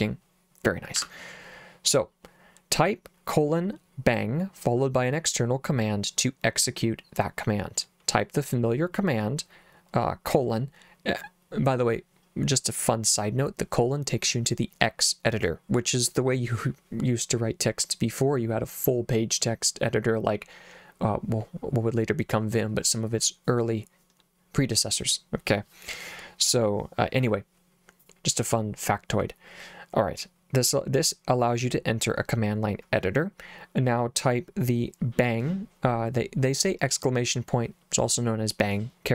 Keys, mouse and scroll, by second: 0.9 Escape.